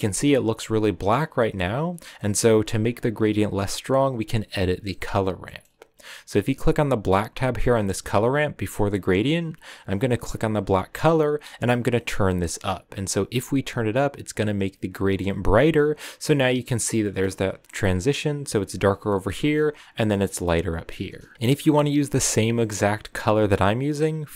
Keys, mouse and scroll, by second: 3.4 click, 7.5 click, 8.1-11.4 middle drag, 11.4 click, 15.2 middle click, 15.8-16.8 scroll down 1, 16.8 scroll down 1, 16.9-21.3 middle drag, 21.3 ctrl+v.